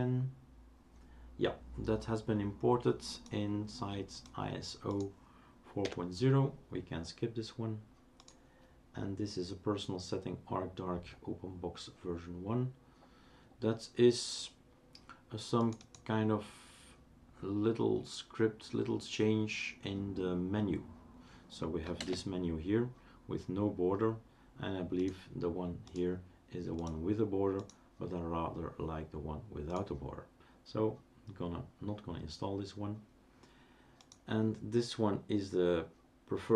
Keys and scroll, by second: 5.8 Delete, 22.0 super+space.